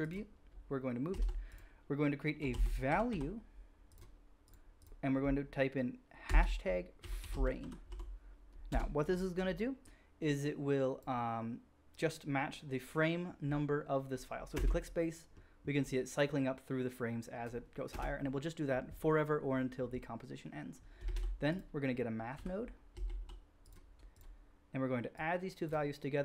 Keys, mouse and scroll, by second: 0.1-0.5 middle drag, 1.0 shift+a, 1.3-4.8 middle drag, 4.8-13.8 drag, 4.8 right click, 14.5 space, 17.9 space, 18.4-20.9 drag, 21.1-24.2 drag, 21.1 shift+a, 24.2-25.1 middle drag, 25.1-26.2 drag.